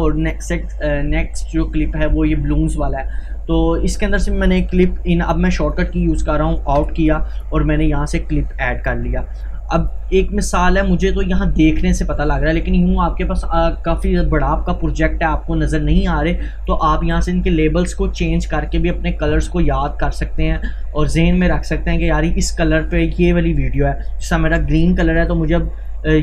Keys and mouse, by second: 3.6 click, 4.8 i, 5.7 click, 6.8 o, 7.4-10.1 drag, 10.1 Delete, 10.8-16.4 drag, 16.6 click, 17.2 right click, 23.7-26.2 drag.